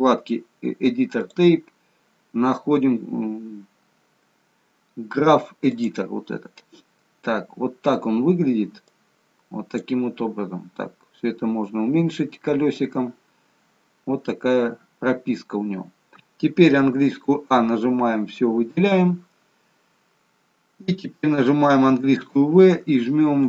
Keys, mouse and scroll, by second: 1.2 click, 9.0 click, 10.4-11.3 scroll down 1, 14.9-15.8 scroll down 26, 16.9-17.3 scroll up 6, 16.9 a.